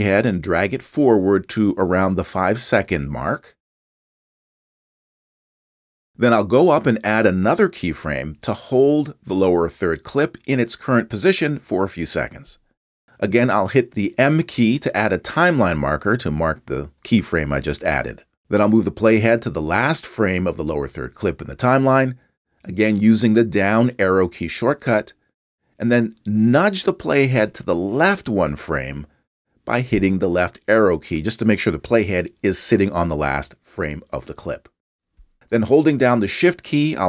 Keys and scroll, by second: 16.5 m, 23.9 Down, 29.0 Left, 32.2 Right, 32.6 Left, 32.9 Right, 33.3 Left.